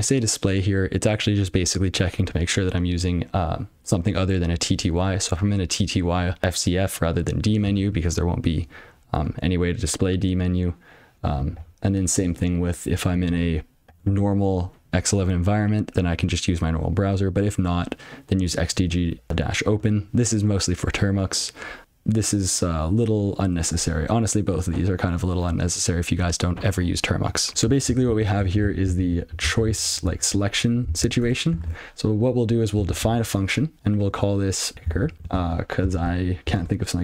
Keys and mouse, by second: 8.2 double click, 9.6 click, 12.1 double click, 12.2 click, 13.8 double click, 14.0 click, 14.6 double click, 20.3 click, 23.9 click, 25.9 click, 28.3 ctrl+n, 30.2 ctrl+p, 31.2 Return, 32.0-36.6 typing.